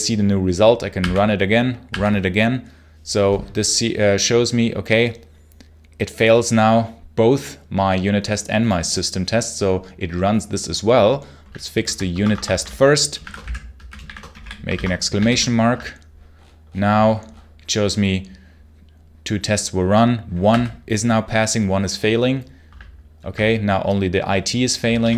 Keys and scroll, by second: 0.8 r, 1.7 r, 11.6 super+l, 12.0 Escape, 12.3-14.7 typing, 15.1 super+h, 20.3 r, 24.9-25.1 typing.